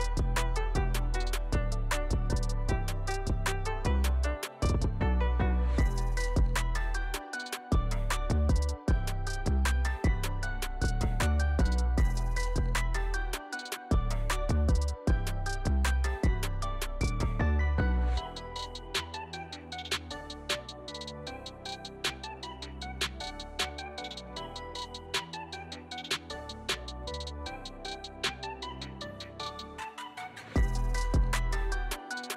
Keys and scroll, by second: 0.8 alt+q, 1.4 alt+q, 2.0 x, 3.1 alt+q, 3.4 alt+q, 4.0 x, 4.7 alt+q, 5.3 alt+q, 6.8 2, 9.5 f, 9.9 1, 10.0 2, 10.5 ctrl+e, 11.1 ctrl+r, 12.3 g, 13.3 g, 13.9 1, 14.6 alt+z, 15.3 alt+z, 15.6 shift+x, 16.4 alt+q, 16.6 alt+q, 19.7 g, 23.2 alt+q, 23.8 Tab, 28.8 alt+q, 29.0 alt+q, 29.8 alt+z, 30.3 q, 30.7 Tab, 31.0 Tab, 31.2 1, 32.0 Tab.